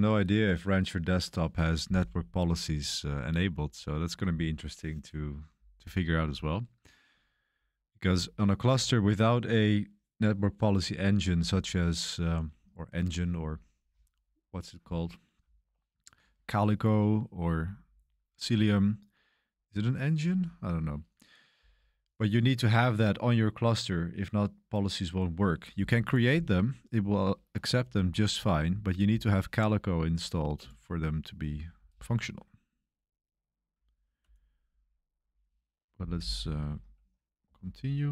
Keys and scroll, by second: 37.7-38.1 typing.